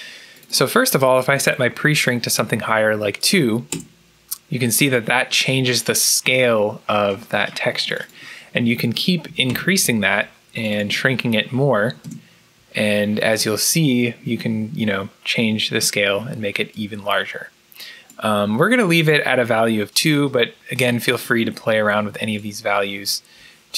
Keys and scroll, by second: 2.4 2, 3.6 Return, 9.1 3, 9.4 Return, 11.7 4, 11.9 Return, 21.9 2, 22.4 Return.